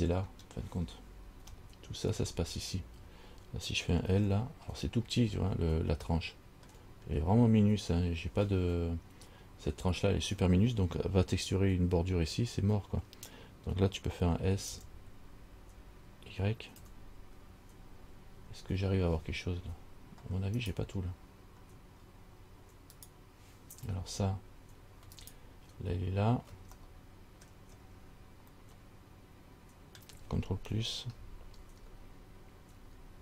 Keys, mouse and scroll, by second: 0.5 scroll up 1, 1.8 shift+middle click, 2.5-3.6 scroll up 1, 3.6 scroll up 1, 4.4 l, 5.3 scroll down 2, 6.3 shift+middle click, 14.9 s, 22.2-23.2 scroll down 2, 23.2 right click, 25.4 alt+right click, 27.0 middle click, 28.0 scroll down 3, 28.9 middle click, 31.9 ctrl+KP_Add, 33.0 ctrl+KP_Add.